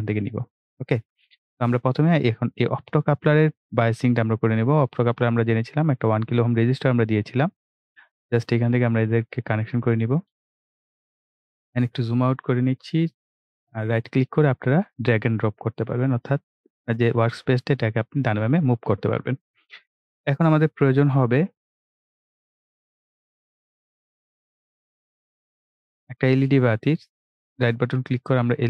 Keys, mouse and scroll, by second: 0.8-6.6 drag, 11.0 scroll down 1, 11.5-11.8 ctrl+scroll down 1, 12.2-22.2 right drag, 27.4 right click, 28.1 click.